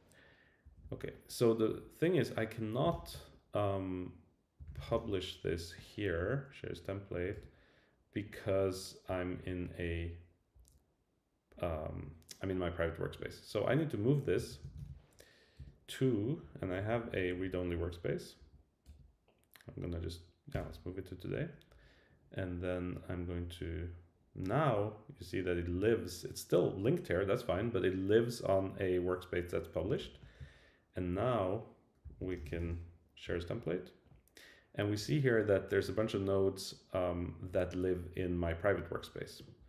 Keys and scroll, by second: 0.6 Up, 2.9 super+k, 6.1 Down, 7.3 Return, 14.5 super+k, 15.6 Return, 16.4 Down, 17.5 Down, 18.4 Up, 18.9 Return, 20.5 Return, 32.0 super+k, 33.3 Return.